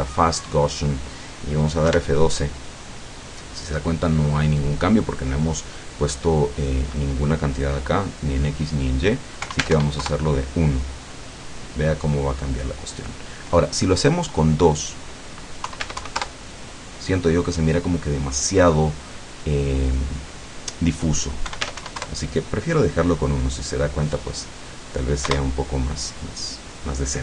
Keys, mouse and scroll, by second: 0.2 click, 2.0 F12, 6.6 click, 9.4 KP_1, 9.6 Tab, 9.8 KP_1, 10.0 KP_Enter, 14.7 click, 15.6 KP_2, 15.8 Tab, 16.0 KP_2, 16.2 KP_Enter, 19.8 click, 21.6 KP_1, 21.7 Tab, 21.9 KP_1, 22.1 KP_Enter, 25.4 Return.